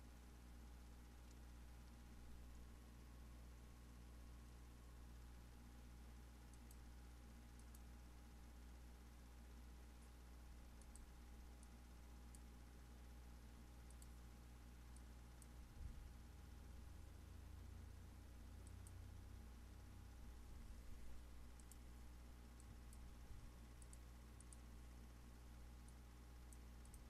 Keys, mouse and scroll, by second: 0.7-6.6 scroll down 1, 6.6-26.9 drag.